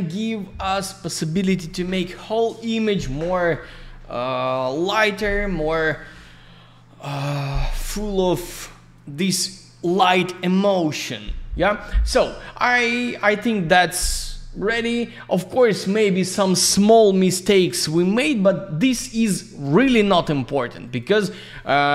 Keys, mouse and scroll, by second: 13.1 click, 13.1 click, 15.3 click, 16.0 click, 16.1 click, 20.8 click.